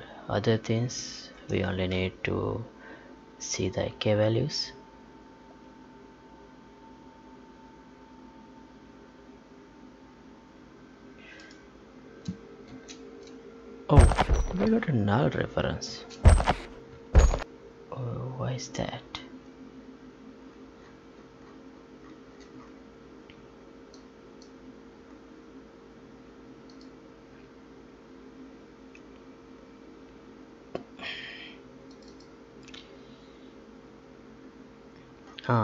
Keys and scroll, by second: 1.4 ctrl+p, 12.6 space, 15.8 space, 17.1 ctrl+p.